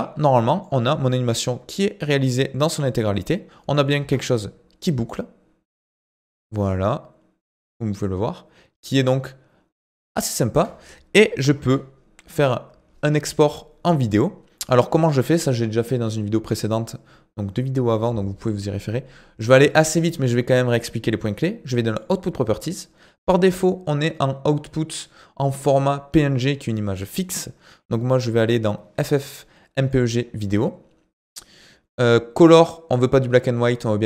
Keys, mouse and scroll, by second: 0.0 click, 0.9-7.0 drag, 10.5 space, 11.6 ctrl+s, 21.9 click, 27.1-30.1 drag.